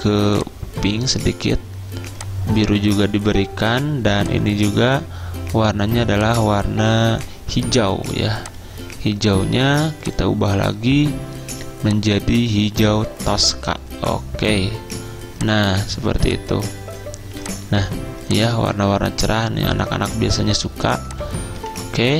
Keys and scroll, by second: 21.6 Escape.